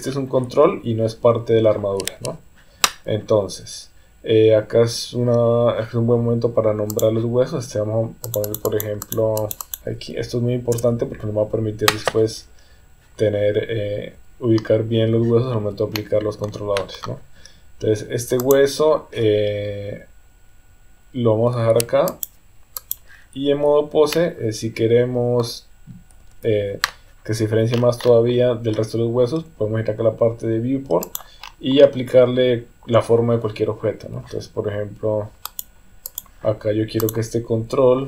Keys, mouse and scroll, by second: 6.9 click, 8.3-11.0 drag, 15.9 shift+middle click, 18.4 click, 22.1 click, 24.1-25.4 middle drag, 26.3 KP_3, 31.1 click, 35.4 click.